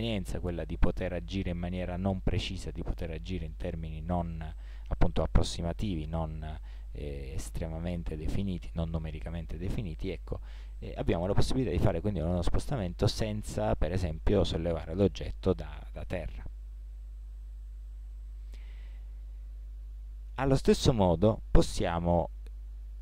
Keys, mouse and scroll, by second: 19.3-20.2 middle drag.